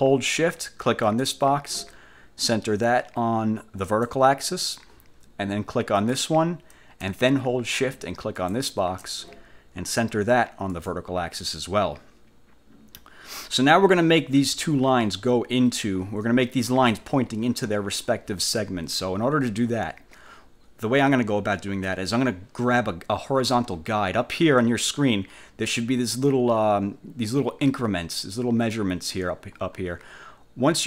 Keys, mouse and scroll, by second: 1.2 shift+click, 4.0 click, 6.0 click, 8.5 shift+click, 10.8 click.